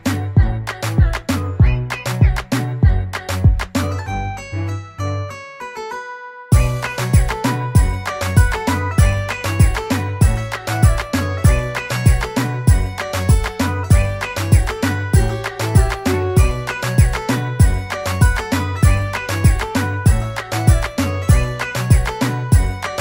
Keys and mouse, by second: 5.0 click, 8.5 click, 13.5 click, 14.9 click.